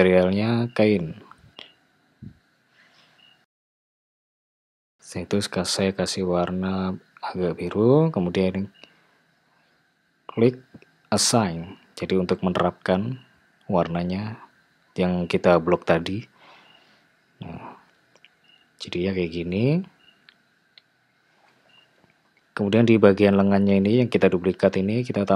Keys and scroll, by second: 0.6-1.7 typing, 13.4 Tab, 17.6 alt+z, 20.4 alt+z.